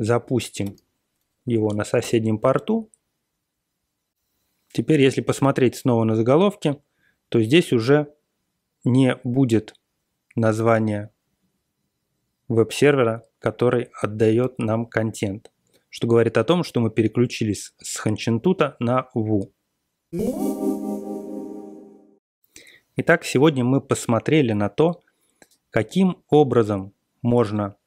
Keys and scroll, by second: 0.6 BackSpace, 0.7 1, 2.0 Return.